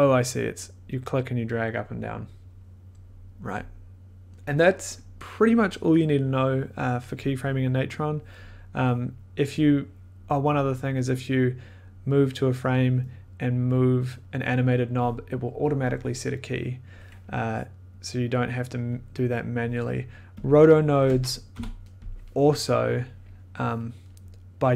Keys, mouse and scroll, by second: 4.3-5.7 drag, 6.5-8.7 drag, 12.8-14.7 drag, 18.9 click, 20.4 click, 21.1 click, 21.5 o, 23.3 click.